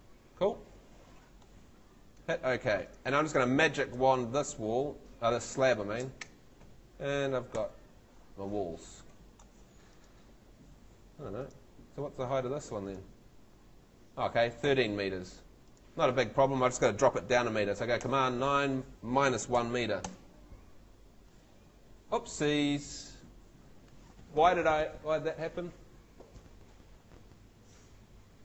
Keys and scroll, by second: 4.0 space, 7.6 F3, 9.1 Escape, 11.9 Home, 14.6 Home, 18.0 super+9, 19.2 space, 19.6 |, 20.1 Page_Up.